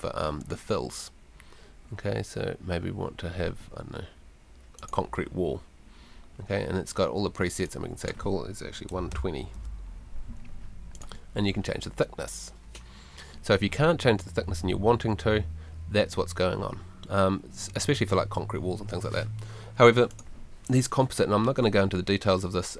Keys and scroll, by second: 8.7-10.0 typing.